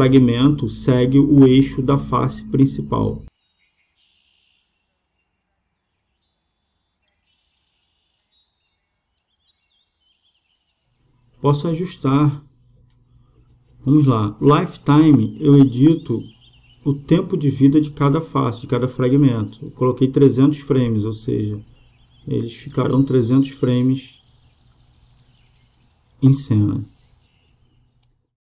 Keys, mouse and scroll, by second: 4.0-6.4 drag, 6.4 KP_0, 7.7-9.3 drag, 13.7-17.7 middle drag, 17.7-18.9 drag, 18.9 KP_0, 21.1-24.3 drag.